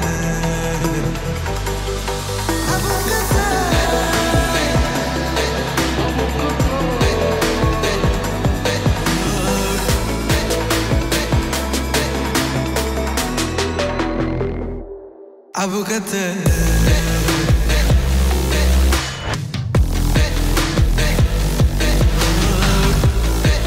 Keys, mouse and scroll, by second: 3.9-5.3 typing, 6.3-8.9 drag, 11.3 s, 12.0 click, 12.4-13.3 typing, 14.8-22.1 drag.